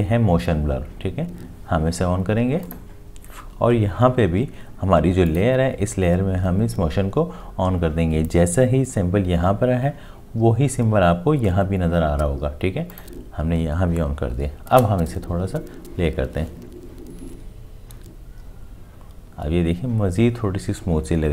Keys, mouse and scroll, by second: 14.7 space.